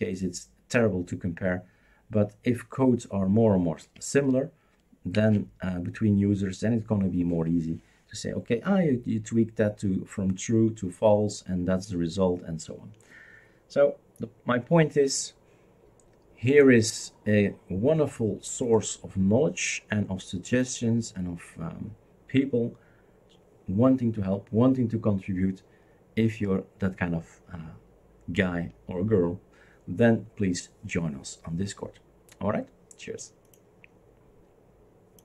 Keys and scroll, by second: 5.1 shift+super+q.